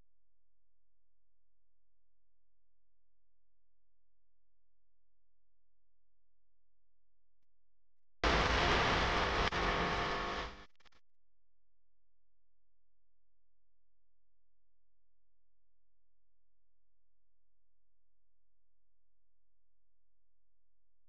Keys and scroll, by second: 2.0 super+z, 4.6 v, 5.3 a, 6.7 v, 8.5 a.